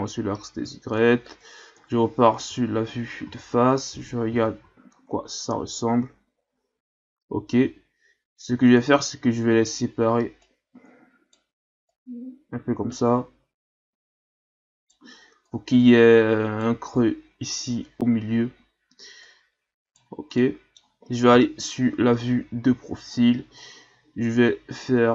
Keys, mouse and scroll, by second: 1.8 KP_1, 3.2 a, 3.8-4.3 scroll down 2, 4.3 Tab, 4.6 a, 5.0-6.1 scroll down 5, 6.8-7.1 scroll up 5, 7.5 Tab, 8.7 right click, 10.4 right click, 11.9 right click, 15.5 right click, 19.2 right click, 20.4 middle click, 21.3 KP_3, 22.2-22.6 shift+scroll down 4, 22.6 scroll up 1, 23.6 right click.